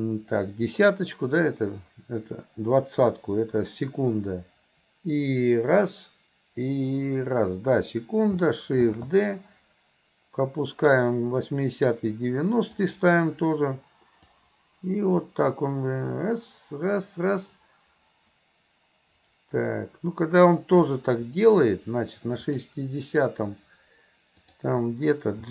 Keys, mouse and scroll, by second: 14.4-20.5 drag, 20.9 middle click, 22.5 click, 24.4 click.